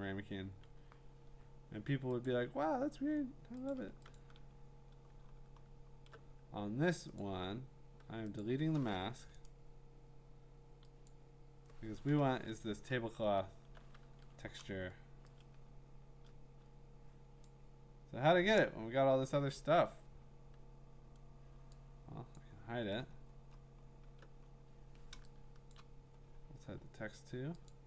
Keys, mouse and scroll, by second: 2.3 click, 3.0 scroll, 3.7 click, 4.2 shift+click, 5.3-5.8 scroll, 7.2 click, 8.4 click, 9.5 right click, 11.1 click, 13.3-14.0 scroll, 14.0 ctrl+t, 16.3 middle click, 17.4 click, 18.7 Return, 19.6 click, 22.4 click, 22.8-25.1 scroll, 25.7 click.